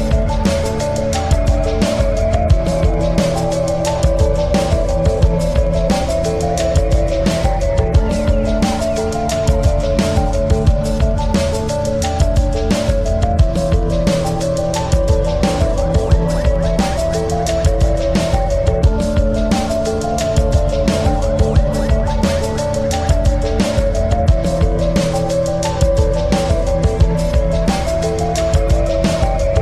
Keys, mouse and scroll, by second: 11.0 scroll down 2, 12.9 click, 22.6 click, 23.4 click, 27.4 ctrl+c, 29.4 click.